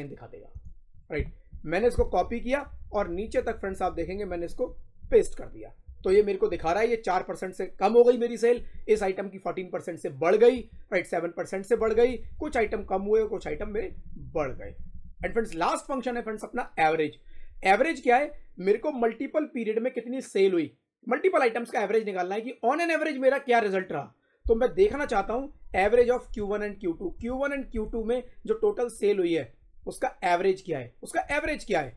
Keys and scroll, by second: 1.7 ctrl+c, 2.4 shift+Down, 4.9 ctrl+v, 5.8 Down, 7.1 Up, 8.5 Down, 10.4 Down, 13.3 Up, 15.1 Right.